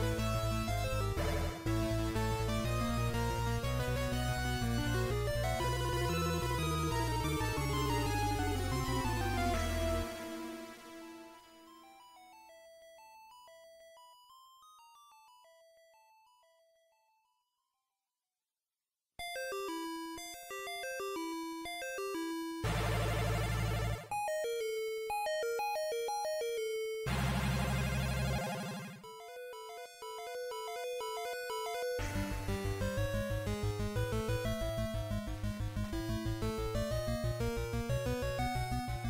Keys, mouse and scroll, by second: 0.7 shift+right click, 1.7 x, 6.4 alt+right click, 7.4 w, 14.2 click, 17.6 click, 22.7 KP_1, 24.0 shift+middle click, 26.5 s, 28.9 click, 31.0 ctrl+z, 32.7 right click, 34.1 shift+v, 38.4 click.